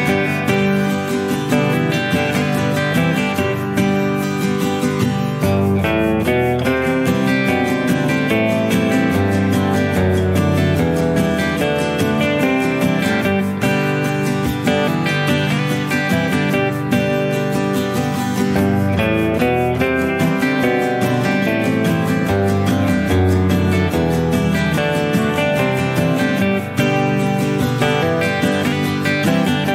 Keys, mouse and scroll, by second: 1.3 click, 2.7 click, 3.9 click, 4.5 click, 4.9 click, 5.3 click, 7.0 click, 7.7 click, 9.0 -, 9.5 middle click, 12.1 click, 14.2 shift+click, 15.2 shift+click, 17.1 shift+click, 19.9-20.4 scroll up 2, 21.5 click, 24.2 click, 24.6-26.4 drag, 27.1 ctrl+z, 27.7 click.